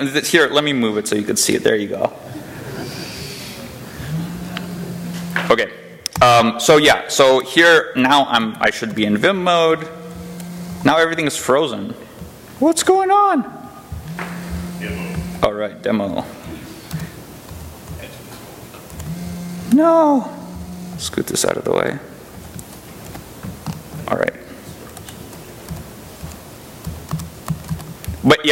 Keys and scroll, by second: 22.7 j, 24.1 j, 25.5 i, 26.0 j, 26.7 k, 26.9 Return, 27.3 Return, 27.5 i.